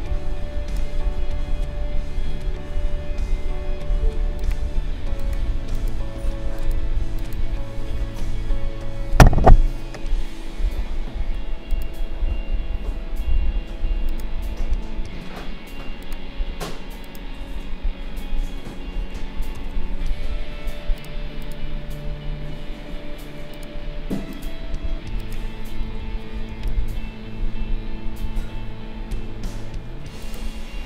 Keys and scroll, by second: 26.5 ctrl+shift+v.